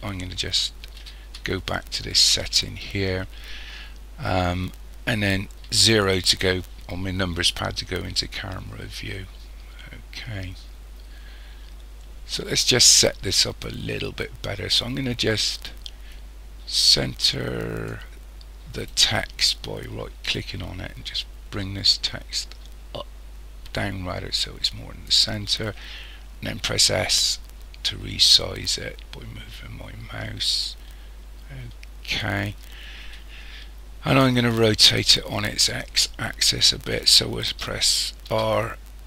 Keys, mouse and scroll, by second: 1.0 ctrl+z, 5.6 KP_0, 16.1 click, 18.8 right click, 20.3 click, 26.7 s, 38.3 r.